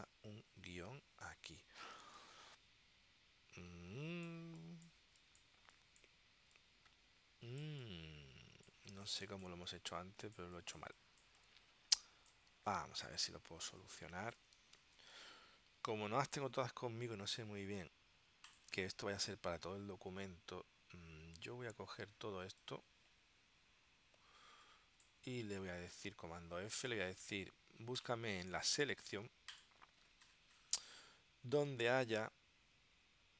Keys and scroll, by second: 2.1 space, 13.9 space, 15.1 space.